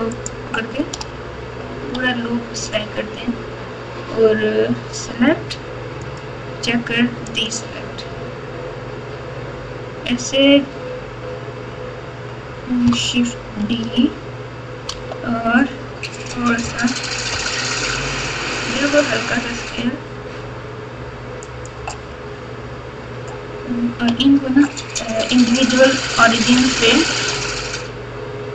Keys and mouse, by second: 0.1 alt+shift+click, 6.0-7.5 drag, 13.6 shift+d, 17.3 s.